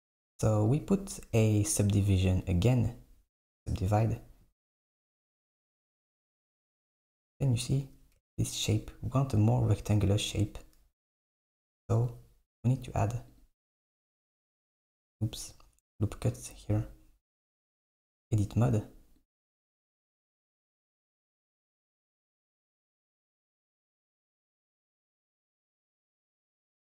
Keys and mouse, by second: 2.2-3.7 drag, 11.1 KP_1, 12.0 click, 13.4 click, 14.8 click, 16.5 click, 17.3 click, 17.6 Tab, 19.3 click, 20.0 click, 24.6 KP_1.